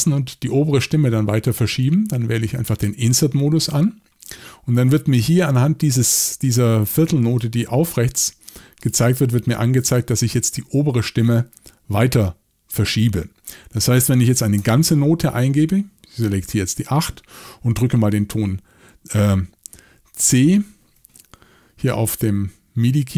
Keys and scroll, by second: 14.6 8.